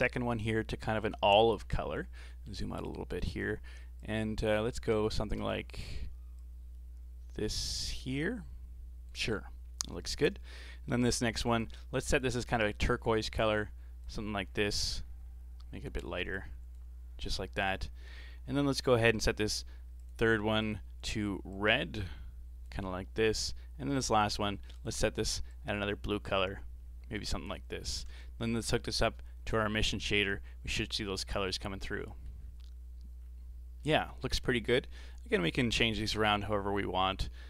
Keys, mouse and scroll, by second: 1.6-2.3 scroll down 8, 2.3 middle click, 2.9 click, 11.5 click, 12.5 click, 20.0 click, 24.2 click, 27.5-27.8 scroll down 4, 27.8-28.9 middle drag, 28.9 click, 31.5-31.9 scroll up 2, 31.9-32.4 middle drag, 32.4-33.2 scroll up 3, 33.2-33.8 scroll down 4, 33.8-34.2 middle drag, 34.2-34.7 scroll down 3, 35.1-36.1 middle drag, 36.1 KP_7, 37.2 middle click.